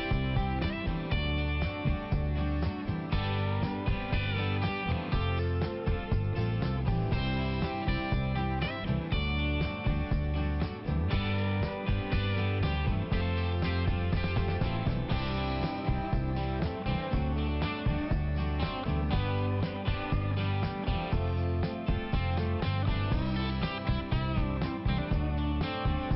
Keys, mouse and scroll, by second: 0.0 double click, 0.2 double click, 0.5 double click, 0.6 double click, 1.0 double click, 2.2 click, 2.6 click, 2.7 click, 2.8 click, 3.0 double click, 3.1 double click, 3.5 double click, 3.6 double click, 3.7 double click, 3.9 double click, 4.0 double click, 4.3 double click, 4.5 double click, 4.6 double click, 4.9 double click, 5.8 click, 6.0 click, 6.3 click, 6.4 double click, 6.6 double click, 6.8 double click, 6.9 double click, 7.5 double click, 7.8 double click, 7.9 double click, 8.1 double click, 8.3 double click, 8.5 double click, 8.7 double click, 9.0 double click, 9.1 double click, 9.5 double click, 9.7 double click, 9.9 double click, 10.2 double click, 12.1 click, 12.6 double click, 12.9 double click, 13.3 double click, 13.4 double click, 13.5 double click, 13.9 double click, 14.0 double click, 14.1 double click, 14.4 double click, 14.5 double click, 15.2 double click, 16.9 click, 16.9 click, 17.3 click, 17.3 double click, 17.5 double click, 17.9 double click, 18.0 double click, 18.2 double click, 18.7 double click, 19.1 click, 19.3 click, 19.5 double click, 19.7 double click, 20.0 double click, 20.1 double click, 20.4 double click, 20.8 click, 20.9 click, 21.3 click, 22.7 click, 22.9 click, 23.0 click, 23.1 double click, 23.3 double click, 23.6 double click, 23.7 double click, 24.0 double click, 24.4 double click, 24.5 double click, 24.8 double click, 25.1 double click, 25.2 double click, 25.5 double click, 25.9 double click, 26.0 double click.